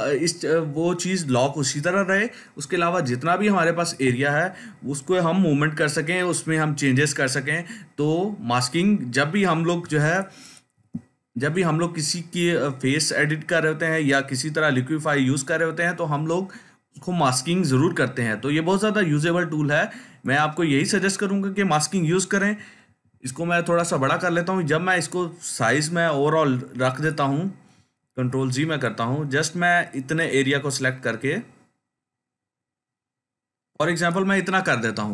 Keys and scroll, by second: 23.0 ], 23.7 ], 27.9 ctrl+z.